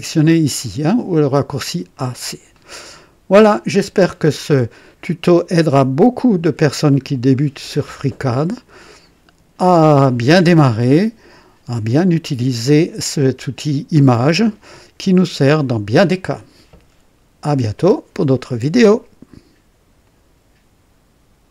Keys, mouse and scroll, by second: 1.8 click, 2.5 click, 4.0 scroll up 1, 4.8 right click, 5.5 click, 7.5 right click, 20.0 right click, 21.4 click.